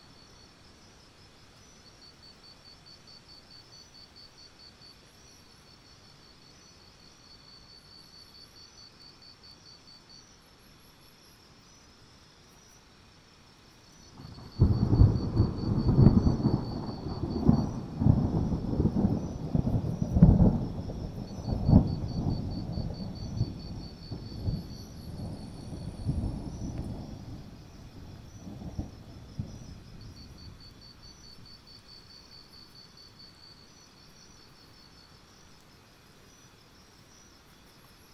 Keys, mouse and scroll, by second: 12.0 alt+scroll down 1, 12.7 click, 13.3 alt+click, 13.8 shift+click, 14.1 right click, 15.1 click, 16.6-17.6 alt+scroll down 1, 17.6-18.3 scroll up 2, 18.3 click, 18.9 click, 19.7 alt+click, 20.4-23.2 shift+drag, 23.2 right click, 23.7 click, 24.4 shift+right click, 26.3 click, 26.8 alt+scroll up 1, 27.0 click, 32.6-33.0 ctrl+scroll up 1, 33.0-35.5 drag, 35.5-36.2 alt+scroll down 1, 36.2-37.8 scroll down 2, 37.8 click.